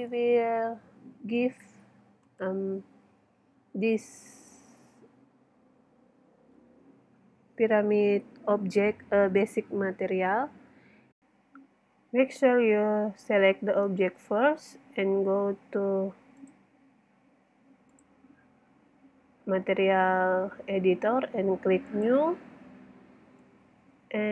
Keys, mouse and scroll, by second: 1.7 middle click, 2.3 right click, 4.1-5.5 middle drag, 6.0 middle click, 6.8 middle click, 7.3 middle click, 7.9 middle click, 8.7-10.5 middle drag, 11.1 middle click, 13.8 right click, 14.5 middle click, 15.1 right click, 18.1 middle click, 19.9-21.8 middle drag, 22.5-24.1 middle drag.